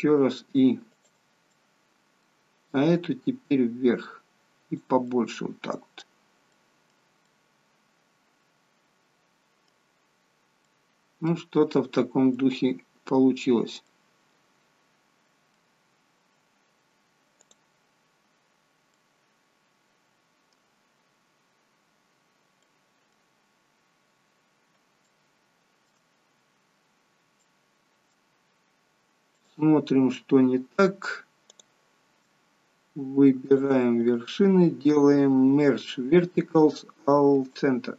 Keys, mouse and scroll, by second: 1.5 middle click, 2.9 click, 5.1 middle click, 6.5 middle click, 7.3 middle click, 10.3 scroll down 3, 10.6 middle click, 11.6-11.9 scroll up 4, 12.3 middle click, 13.9 middle click, 15.9-16.3 scroll down 3, 17.5 click, 18.9 middle click, 20.8-21.1 scroll up 5, 22.6 middle click, 25.1 shift+middle click, 26.2-26.5 scroll up 4, 27.5 middle click, 29.4 click, 31.5 click, 33.5 shift+click, 34.0 right click.